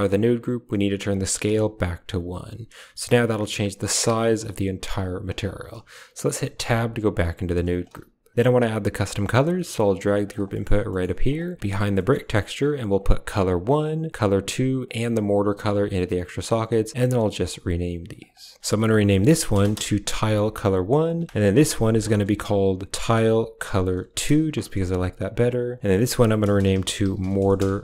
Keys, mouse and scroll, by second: 1.0 click, 3.1-5.2 shift+drag, 6.4 Tab, 7.8 g, 9.0 g, 10.4 click, 10.7 click, 11.0 g, 11.8 click, 12.8-13.6 drag, 14.0 drag, 14.7-15.4 drag, 15.6 click, 16.9 click, 18.0 click, 18.2-19.6 drag, 18.6 Right, 19.1 Right, 20.8 ctrl+click, 21.4 click, 21.6-25.6 drag, 25.7-27.6 drag.